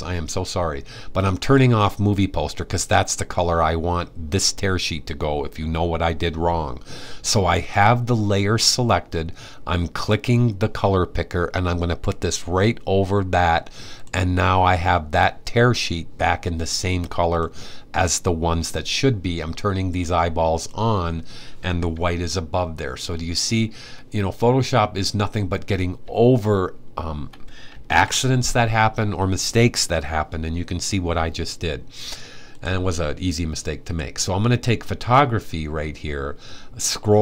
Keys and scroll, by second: 27.5 super+s.